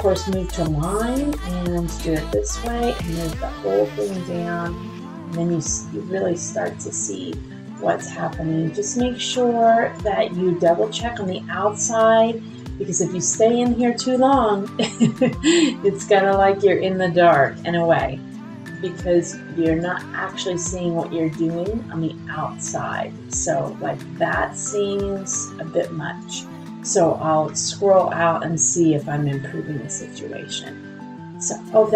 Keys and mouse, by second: 4.0 shift+click, 6.3 click, 7.5 click, 15.0 shift+click, 16.2-17.5 drag, 23.9-27.9 middle drag.